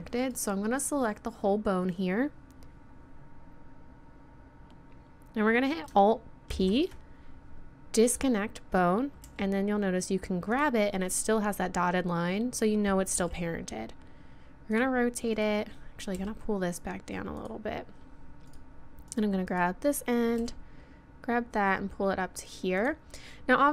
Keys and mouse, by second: 0.2-2.2 drag, 6.5 alt+p, 9.3 g, 13.2 r, 15.4-17.3 drag, 16.2 g, 20.4 g.